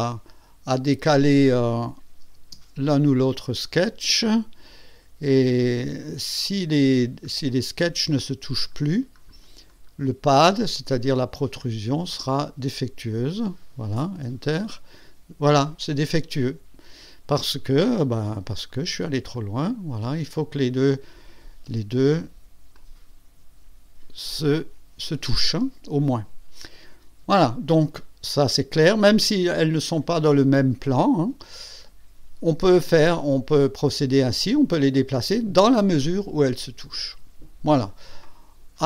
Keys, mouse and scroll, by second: 0.7 click, 2.7 space, 5.5 click, 6.9 scroll up 2, 7.9 scroll up 2, 8.5-9.4 scroll up 4, 9.7 scroll up 2, 10.9-12.2 scroll up 3, 14.7 Return, 14.9 Return, 18.4 click, 18.7 click, 18.9-20.3 scroll down 4, 22.7-24.2 drag, 29.0 click.